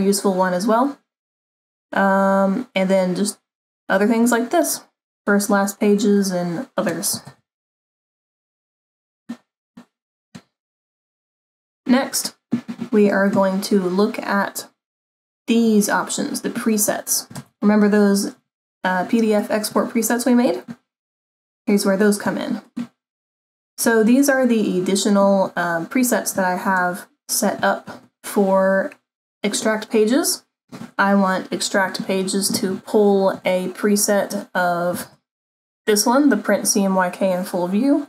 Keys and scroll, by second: 7.4 super+-, 11.1 super+=, 17.5 -.